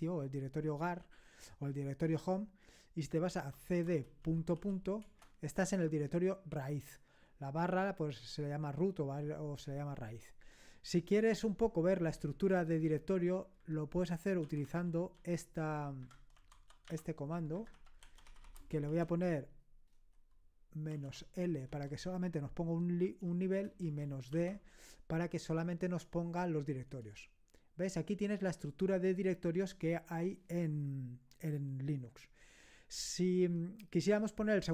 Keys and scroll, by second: 3.2-4.5 typing, 5.0 Return, 13.6-18.6 typing, 20.9-21.7 typing, 23.5-24.3 typing, 27.0 Return.